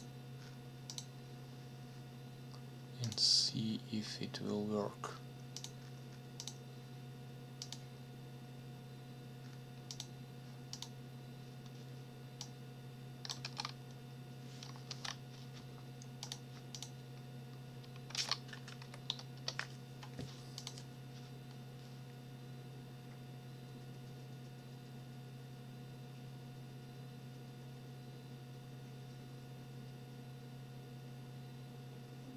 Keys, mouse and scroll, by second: 0.9 click, 3.0 click, 5.6 click, 6.4 click, 7.6 click, 9.9 click, 10.7 click, 12.4 click, 13.4 ctrl+v, 14.9 ctrl+s, 16.2 click, 16.7 click, 18.1 ctrl+c, 18.8 Up, 19.3 Return, 20.6 click.